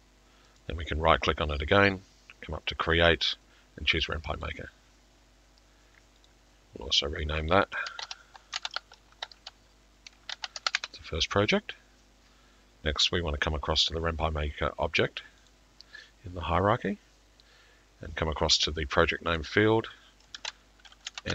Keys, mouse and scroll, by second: 0.6 typing, 2.1 typing, 4.5-5.6 scroll, 6.3 click, 7.8 click, 8.4-9.4 typing, 15.5 click, 15.5 typing, 19.4 click, 20.3 click, 20.9-21.3 typing.